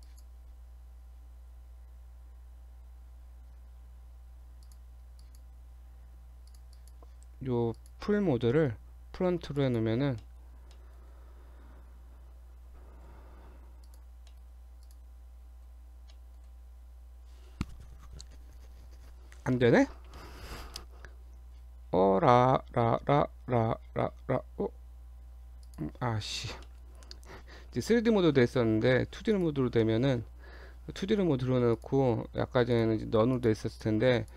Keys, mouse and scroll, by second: 0.1 click, 3.7 a, 4.6 click, 5.2 click, 6.0 Tab, 6.5 click, 6.8 click, 7.7 click, 10.2 middle click, 10.7 middle click, 12.0 Tab, 12.5 Tab, 13.1 z, 14.3 middle click, 14.5 Tab, 14.8 click, 15.4 scroll down 2, 16.1 middle click, 19.5 middle click, 20.2 middle click, 21.8-23.3 scroll down 12, 23.6-24.9 scroll up 12, 25.6 click, 26.7 middle click, 27.3 scroll up 1, 29.3 click, 29.8 middle click, 30.1 scroll up 1, 31.8 click, 32.7 click, 33.8 click, 34.1 click.